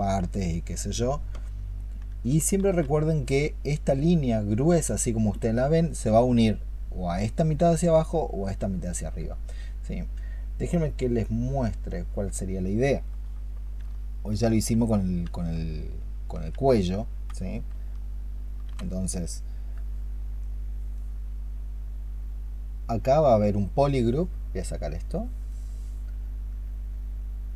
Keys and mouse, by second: 2.5 ctrl+z, 13.8 shift+click, 15.6 shift+click.